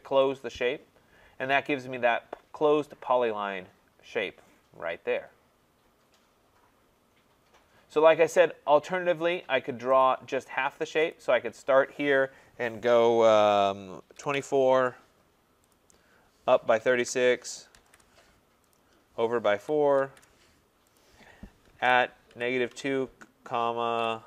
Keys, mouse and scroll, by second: 0.4 click, 7.3 middle click, 7.4-8.3 middle click, 8.2 middle click, 8.8 middle click, 8.9 middle click, 10.0 click, 11.2 click, 14.2-15.2 typing, 14.7 Return, 15.8 click, 16.6-18.3 typing, 18.7 click, 19.4-20.1 typing, 21.0 click, 21.6-22.7 typing, 23.7-24.2 typing.